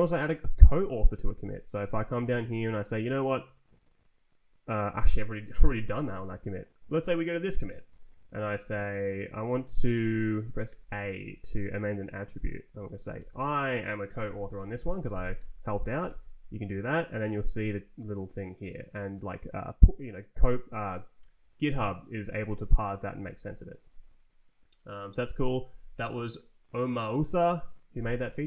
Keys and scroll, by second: 0.9 ctrl+t, 1.3 Right, 2.0 Up, 5.6 Down, 9.1 shift+a, 9.8 Escape, 10.5 a, 12.4 Down, 13.1 Return, 14.1-15.2 typing, 15.2 Tab, 15.9 Return.